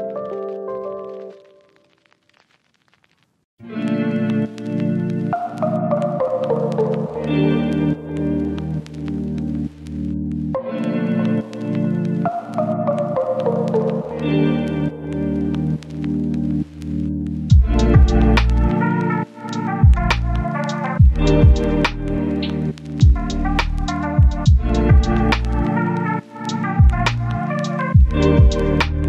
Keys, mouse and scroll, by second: 0.3 click, 2.6 right click, 3.4 scroll down 1, 3.5 scroll up 1, 3.6 right click, 4.5 scroll down 1, 4.7-5.1 scroll up 2, 4.8 right click, 5.2 right click, 6.1 click, 8.2 right click, 9.1 click, 10.6 right click, 11.2 click, 11.9 right click, 12.6 click, 15.2 scroll down 1, 15.3-17.4 right drag, 17.4 scroll up 1, 17.5-23.2 right drag, 24.6 click, 25.4 right click, 26.7 click.